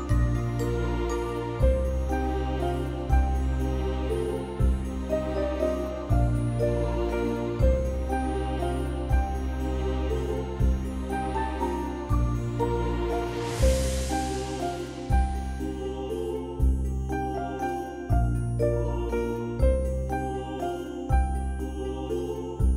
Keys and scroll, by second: 0.8 [, 0.9 [, 8.1 space, 8.8 x, 11.9 space.